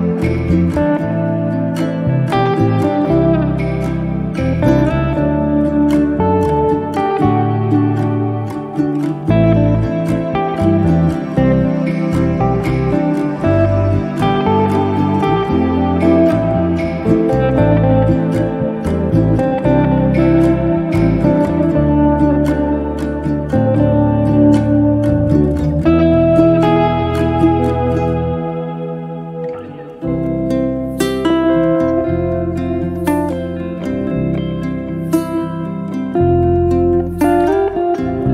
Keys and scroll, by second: 6.9 m, 11.7 KP_Multiply, 12.2 4, 12.8 Return, 13.9 space, 27.2 m, 30.6 space, 34.8 m.